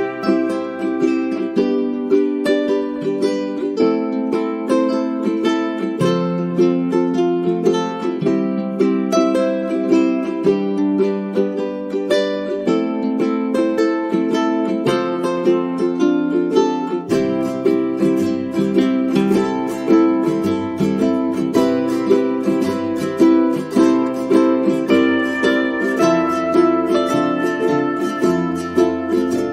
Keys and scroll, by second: 1.7 ctrl+z, 17.2-20.9 typing.